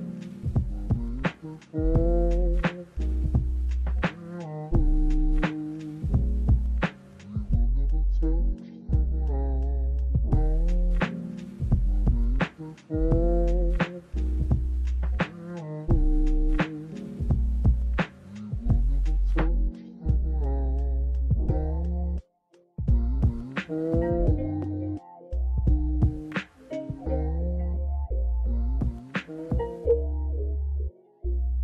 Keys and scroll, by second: 0.1 space, 1.0 space, 2.9 space, 5.6 space, 6.6 space, 7.5 space, 10.1 space, 11.3 space, 12.5 s, 12.8 space, 14.3 space, 15.6-22.0 typing, 23.2 space, 25.2 space, 28.0 space, 28.7 space, 29.3 space.